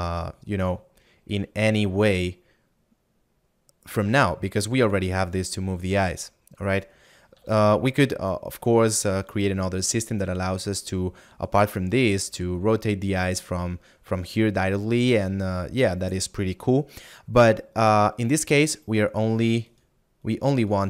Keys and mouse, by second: 4.8 right click, 19.8 right click.